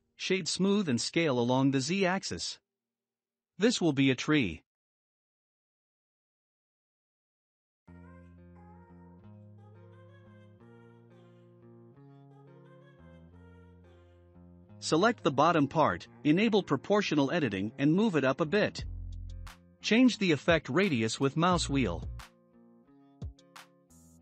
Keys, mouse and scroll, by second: 1.9-3.1 middle drag, 3.1 right click, 4.7-5.4 shift+middle drag, 5.4 s, 8.6 s, 10.3-11.3 shift+middle drag, 11.3 scroll up 2, 11.7-12.1 middle drag, 12.1 Tab, 12.4 scroll up 2, 12.9 middle click, 13.6 click, 14.9 click, 17.2-21.2 drag.